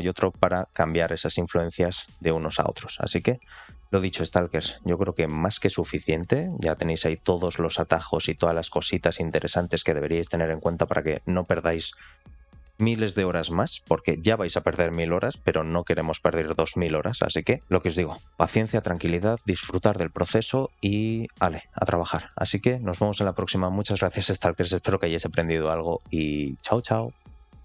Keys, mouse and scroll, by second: 2.2 ctrl+click.